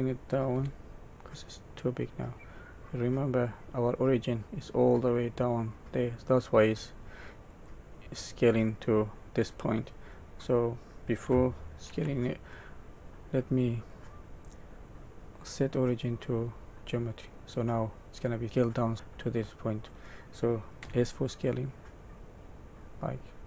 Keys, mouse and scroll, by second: 0.5 s, 7.9-8.5 scroll down 6, 10.0-10.9 scroll up 5, 11.9 ctrl+z, 13.0 right click, 18.0 middle click, 20.7 s.